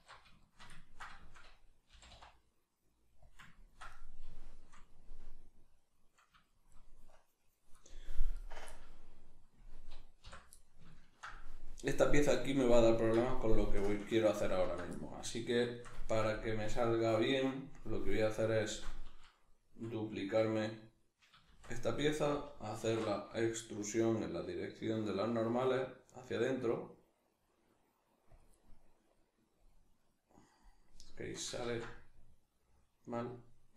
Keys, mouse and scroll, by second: 0.4-10.2 shift+middle drag, 1.9 g, 3.4 click, 8.4 right click, 10.2 l, 10.6-20.0 middle drag, 21.5 shift+d, 21.9 right click, 22.8 alt+e, 28.3 click, 28.5-33.7 middle drag, 31.6 ctrl+z.